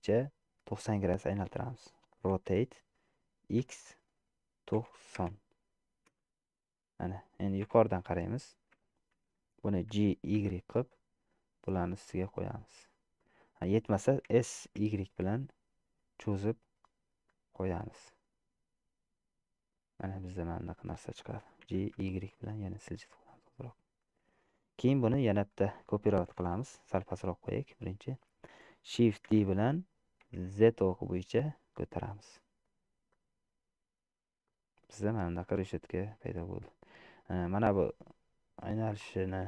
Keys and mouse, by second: 2.4 r, 7.7 KP_7, 10.1 g, 14.5 s, 18.0-19.9 middle drag, 20.9 middle click, 21.9 g, 27.2 g, 29.5 shift+d, 34.5 click, 35.8-37.8 middle drag.